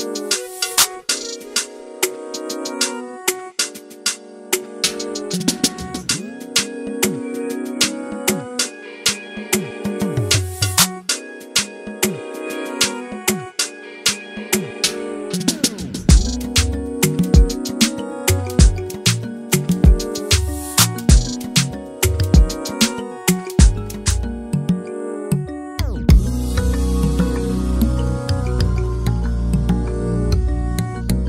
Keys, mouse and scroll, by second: 1.0 click, 1.9 click, 2.0-4.5 middle drag, 4.5-6.5 drag, 7.3-8.4 middle drag, 8.4 click, 9.2-10.5 middle drag, 10.5 click, 13.1 click, 14.9-15.3 scroll down 2, 15.4-16.1 middle drag, 16.1 s, 17.5 shift+middle click, 17.9-18.2 scroll up 1, 18.2-22.2 middle drag, 22.2 click, 22.6 shift+click, 23.1 shift+click, 24.2 alt+d, 29.8 r.